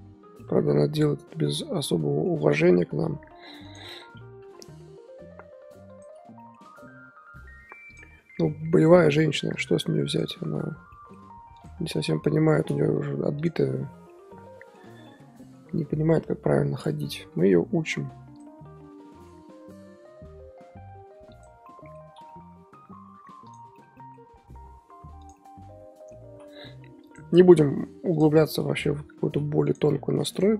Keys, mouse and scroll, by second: 0.4-3.0 middle drag, 3.0 KP_1, 3.6 click, 4.4 KP_1, 5.9 click, 6.4 shift+middle drag, 6.6-7.8 scroll up 3, 7.8 click, 8.2 r, 9.5 click, 10.0 click, 10.9-11.5 middle drag, 11.5 click, 11.9 KP_1, 12.8 r, 14.1-16.3 middle drag, 16.3 KP_1, 17.3 r, 18.3 click, 19.0 r, 21.6-22.0 middle drag, 22.0 scroll down 4, 22.2-23.4 middle drag, 23.4 click, 23.7-24.2 shift+middle drag, 24.2-24.5 scroll up 5, 24.5 r, 24.6 r, 25.4 middle click, 26.2 r, 27.3-27.7 middle drag, 27.7 r, 28.2-29.2 middle drag, 29.2 r, 29.2 r, 29.8 scroll down 4, 30.1 a, 30.3-30.5 right drag.